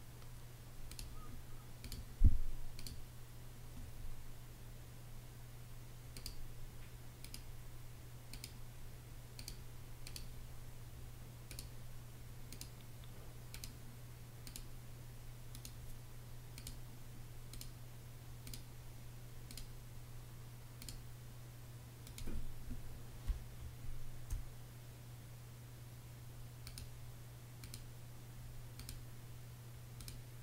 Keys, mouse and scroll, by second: 22.8 space.